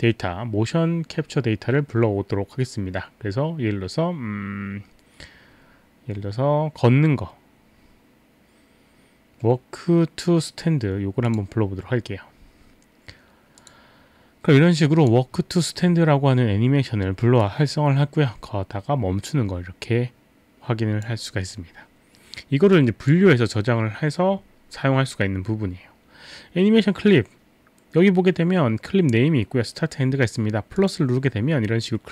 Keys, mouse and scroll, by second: 10.5 right click, 11.3 click, 13.6 click, 14.9 click, 17.4 click, 18.9 drag, 19.1-19.5 drag, 20.8 drag, 22.7 click, 30.8 click.